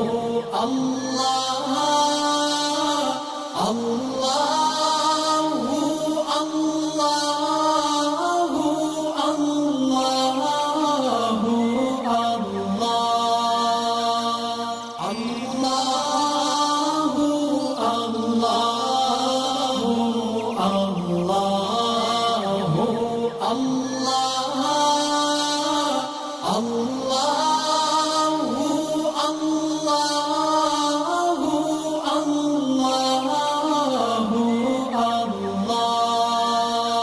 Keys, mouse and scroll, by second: 2.7-3.9 alt+drag, 4.9-5.4 click, 5.9-6.2 click, 6.6-7.0 drag, 9.6-10.4 click, 10.5-11.2 click, 11.8 alt+scroll down 1, 12.7 alt+scroll up 1, 14.8 click, 18.1-19.2 shift+drag, 23.2-24.2 drag, 29.4 alt+scroll down 1, 30.3 click, 30.6 click, 30.7 alt+scroll up 1, 31.6 space, 31.7 click, 32.2 space, 32.6-33.5 alt+scroll down 3, 33.6 alt+scroll up 1, 34.2 space, 34.4 click, 35.1 scroll up 1, 35.4 click.